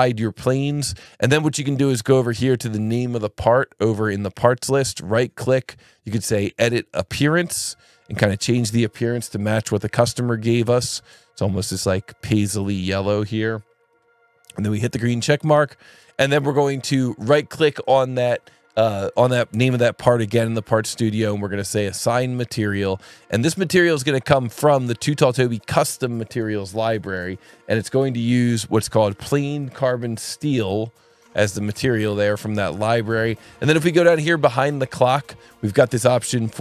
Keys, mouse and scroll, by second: 0.2 click, 1.6 click, 5.1 right click, 7.3 click, 9.0 click, 10.0 click, 10.6 click, 11.5 click, 14.0-14.6 scroll up 1, 15.3 click, 16.0-17.2 scroll down 1, 17.2-17.7 scroll up 1, 17.7 right click, 22.0 click, 23.3 click, 24.5 click, 27.8 click, 30.8 click, 32.4 click, 33.6 alt+1, 35.2 click, 36.3 ctrl+shift+click.